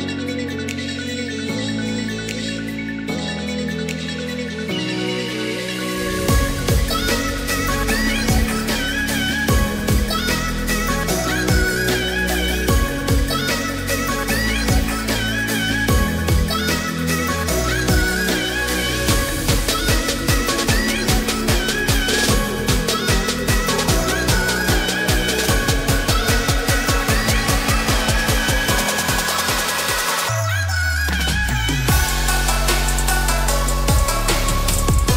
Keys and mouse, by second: 0.8-2.5 middle drag, 2.8-4.8 middle drag, 6.8-7.9 drag, 11.3 alt+e, 19.4 click, 19.8-21.3 middle drag, 22.0 Escape, 22.0 s, 22.5 x, 23.0 KP_0, 23.6 KP_Enter, 24.7-26.7 middle drag, 26.9 shift+middle click, 28.1 shift+middle click, 28.5 shift+click, 29.1 shift+middle click, 31.9 e, 33.6 click, 34.5 s.